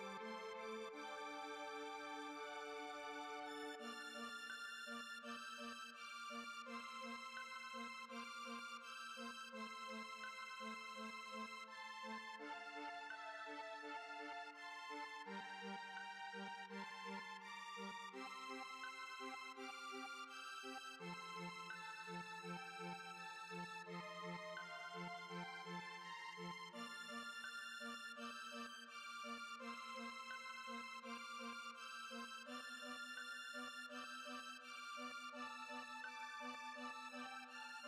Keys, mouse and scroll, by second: 3.2 space, 3.8-4.5 shift+middle drag, 4.5 z, 4.9 z, 5.8 click, 8.8 click, 9.7 click, 10.6-13.7 drag, 23.4 space, 24.0 middle click, 24.3 space, 24.9 click, 26.0-27.6 drag, 27.9 click, 28.2 h, 28.4 click, 28.8 click, 29.2 click, 29.3 h, 29.5 click, 30.7 click, 31.2 click, 31.7-33.4 drag, 33.4 space.